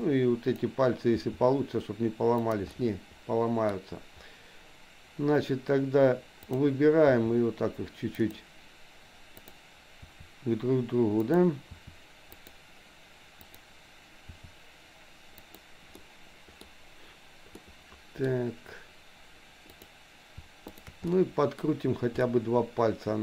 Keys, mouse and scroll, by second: 0.2 click, 1.2 r, 2.8-4.2 middle drag, 6.5 click, 7.2 r, 9.4 click, 10.2 r, 11.8 r, 13.4 click, 14.4 r, 15.9 middle click, 17.5 middle click, 19.8 click, 20.7 shift+click, 21.0 middle click, 22.3-23.2 middle drag.